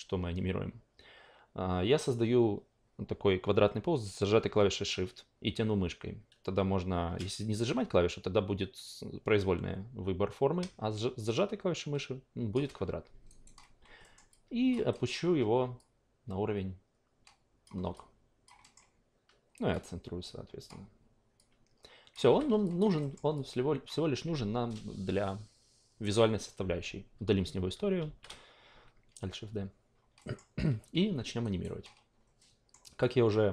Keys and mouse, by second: 13.3 alt+right click, 14.0 alt+middle click, 14.3-14.7 alt+drag, 14.9 alt+middle drag, 15.8-17.6 drag, 17.9-18.4 alt+drag, 18.6 alt+middle click, 19.7 click, 21.5 click, 22.3 f, 22.6 alt+click, 23.0 alt+middle click, 23.3-27.3 alt+drag, 28.0 alt+shift+d, 30.2 alt+middle drag, 31.4 alt+right drag, 32.4 alt+middle drag, 33.0-33.5 alt+drag.